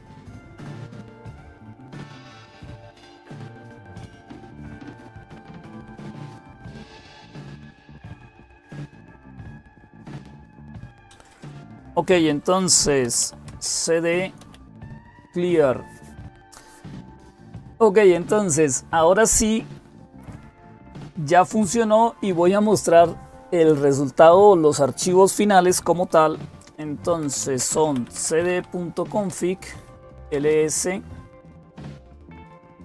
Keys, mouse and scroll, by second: 2.7 click, 4.1 ctrl+super+Up, 6.0 alt+super+Right, 6.4 alt+super+Right, 7.0 super+Right, 9.4 alt+super+Right, 9.4 click, 10.6 click, 12.6-15.3 typing, 26.8-30.3 typing, 29.0 Return.